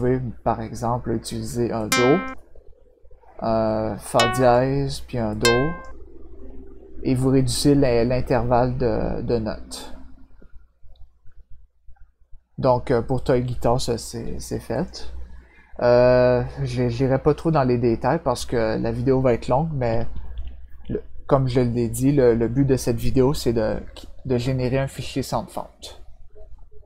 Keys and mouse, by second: 1.8 click, 4.0 click, 5.3 click, 14.7 click.